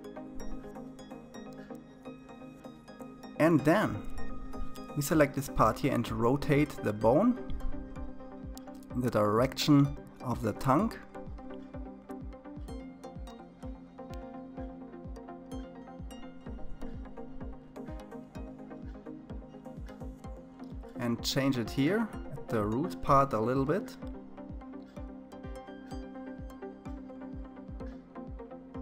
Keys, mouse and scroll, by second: 0.5-3.5 shift+middle drag, 3.5 click, 5.1 g, 12.1-13.3 scroll up 4, 14.3 g, 20.1 click, 21.6 g, 23.9-24.3 scroll up 3, 26.0 g.